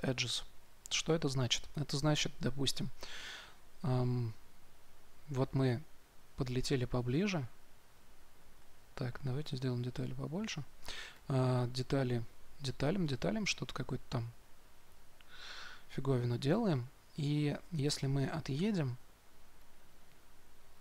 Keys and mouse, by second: 9.5-15.8 drag, 18.0-20.8 middle drag.